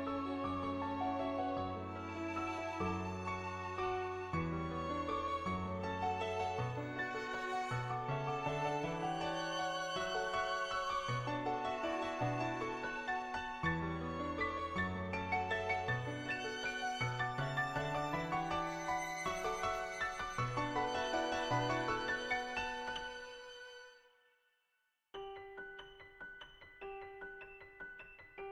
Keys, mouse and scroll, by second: 2.9 r, 4.5 middle click, 5.9 middle click, 7.1 middle click, 9.8 Tab, 12.0 click, 13.2 ctrl+z, 14.3-16.1 drag, 16.8 click, 18.0 ctrl+z, 18.2 click, 19.0 ctrl+z, 19.8 click, 20.7 click, 21.3 shift+click, 22.0 middle click, 22.4 shift+middle click, 23.7-24.4 typing, 24.6 click, 26.3 ctrl+z, 26.3 click, 27.6 click, 28.1 ctrl+z.